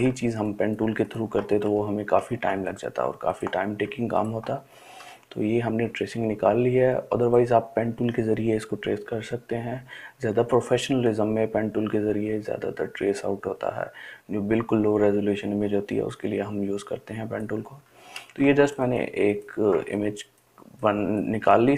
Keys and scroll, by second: 2.7 ctrl+space, 3.3 ctrl+space, 19.1 ▯.